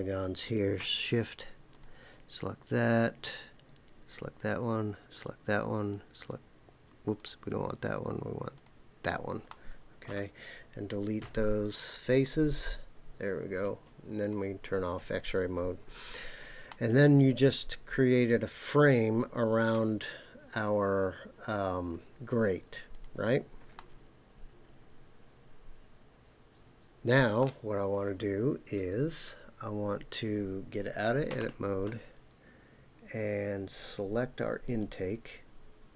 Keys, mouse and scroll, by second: 1.7 shift+click, 4.1 shift+click, 5.1 shift+click, 6.2 shift+click, 7.1 shift+click, 8.5 shift+click, 9.5 middle click, 11.2 Delete, 14.2 click, 15.4-16.2 scroll down 7, 16.7-19.7 middle drag, 22.9 click, 23.7-27.4 middle drag, 31.3 Tab, 34.6 click.